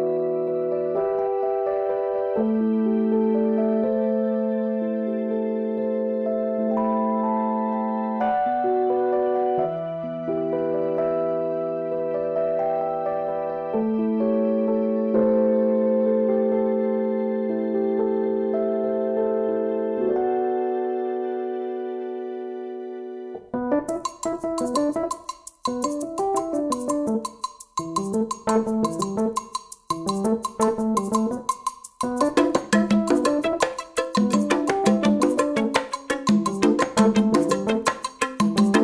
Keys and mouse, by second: 4.1 right click, 5.5 click, 6.1 right click, 7.9-15.8 drag, 20.8 click, 21.0 click, 28.2-31.9 drag, 32.5-33.3 typing.